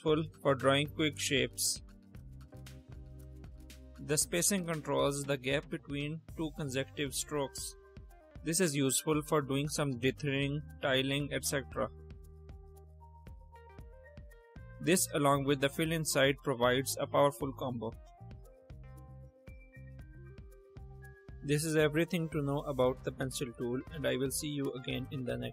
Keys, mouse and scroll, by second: 1.2-2.2 drag, 4.1 ctrl+click, 4.6 click, 5.6 click, 6.1-7.9 drag, 8.1-9.3 drag, 9.9-12.8 drag, 14.8 click, 15.8 click, 16.2-17.4 drag, 18.2-20.1 drag, 21.2 space.